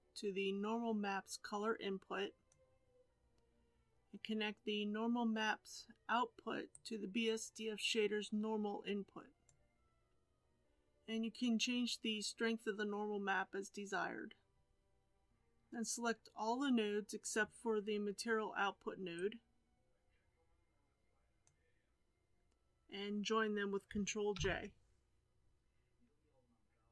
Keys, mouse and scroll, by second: 9.4 click, 24.3 ctrl+j.